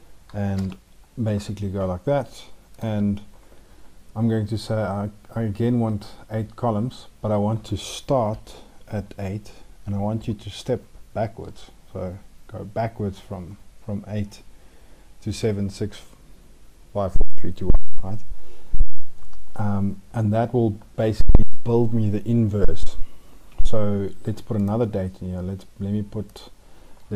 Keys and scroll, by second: 0.4 ctrl+v.